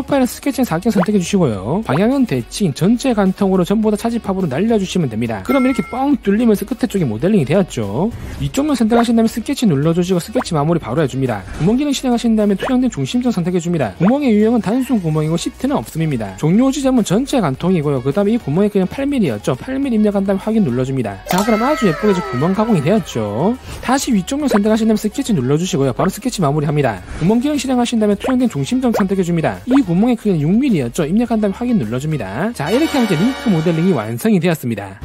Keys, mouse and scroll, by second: 1.2 click, 2.6 click, 3.5 click, 4.3 click, 5.0 click, 8.9 click, 14.0 click, 15.4 click, 17.6 click, 19.3 click, 21.2 click, 23.6 shift+middle click, 24.8 click, 26.5 s, 29.7 click, 30.8 click, 32.3 click.